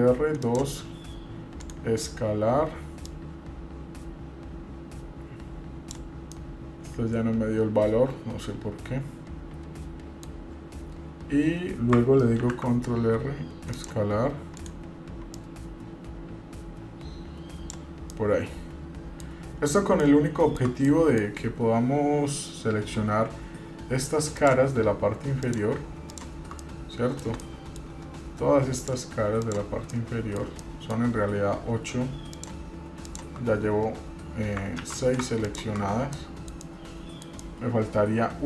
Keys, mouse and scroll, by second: 3.3-6.2 drag, 6.5-10.4 middle drag, 12.6 ctrl+r, 15.5-18.0 drag, 18.3-19.4 middle drag, 20.2 shift+middle click, 21.1 middle click, 21.5 scroll up 2, 24.6 click, 25.6 click, 26.3 shift+click, 26.8 middle click, 27.6 shift+middle click, 29.0 shift+click, 29.6 shift+click, 30.1 middle click, 30.8 shift+middle click, 31.8 scroll up 1, 32.6 shift+click, 33.2 shift+click, 33.7 scroll down 2, 34.2-34.8 scroll up 3, 35.0 ctrl+z, 35.6 shift+click, 36.1 scroll down 3, 36.4 middle click, 36.8 middle click, 37.6-38.4 middle drag.